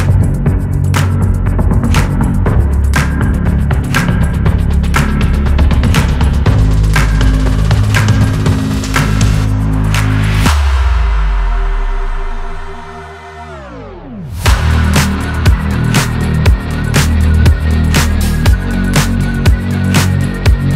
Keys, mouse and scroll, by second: 0.6 click, 3.6-5.0 scroll up 1, 16.2 click, 19.2 Left, 20.4 click.